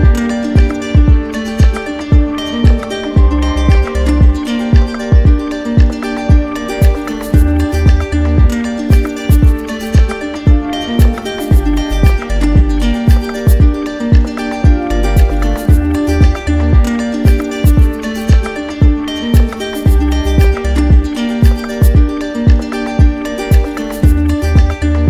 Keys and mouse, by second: 0.9 right click, 3.2 click, 4.0 right click, 4.9 alt+right click, 6.6 shift+right click, 7.4 right click, 8.5 right click, 8.9 right click, 9.7 z, 11.1 click, 13.3 click, 13.6 shift+click, 14.1 right click, 16.0 click, 18.4 right click, 21.6 click, 24.5 right click, 24.9 shift+right click.